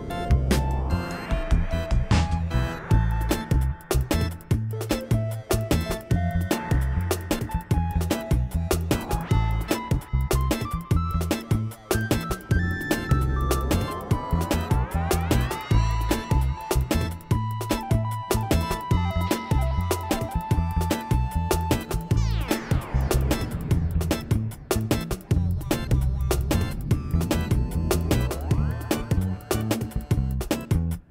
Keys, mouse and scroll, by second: 0.9 ctrl+a, 1.7 middle click, 2.1 middle click, 2.3 shift+middle click, 2.6 g, 3.7 ctrl+z, 3.9 ctrl+z, 4.0 click, 4.3 ctrl+z, 4.4 click, 4.6 ctrl+z, 4.8 g, 5.8 click, 6.2 g, 7.2 click, 8.6 click, 8.8 click, 9.1 g, 10.1 click, 10.2 g, 11.1 g, 11.5 click, 11.8 click, 12.3 g, 14.0 g, 14.7 ctrl+a, 15.2 click, 15.6 Tab, 15.8 click, 16.0 Tab, 16.6 g, 17.3 g, 18.5 g, 19.1 g, 21.0 g, 22.3 g, 23.1 click, 23.2 Tab, 23.5 Tab, 23.7 middle click, 24.3 middle click, 24.6 Tab, 24.9 g, 25.8 click, 26.0 Tab, 26.3 click, 26.5 click, 26.8 click, 27.2 Tab, 27.6-30.2 typing, 29.3 click, 30.7 Tab.